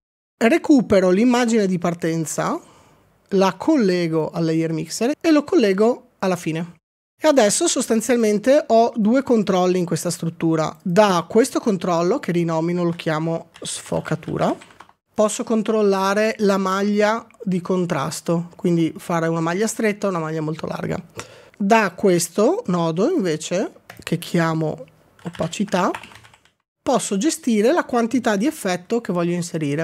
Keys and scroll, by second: 13.4-15.2 typing, 16.8 typing, 25.1-26.9 typing.